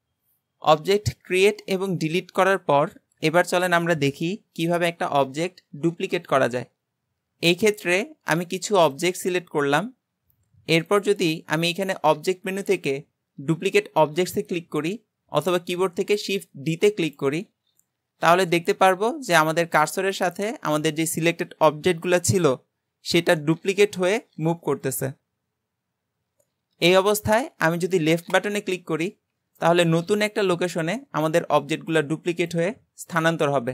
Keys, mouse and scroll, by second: 7.7 click, 8.3 shift+click, 9.0 shift+click, 10.9-14.0 drag.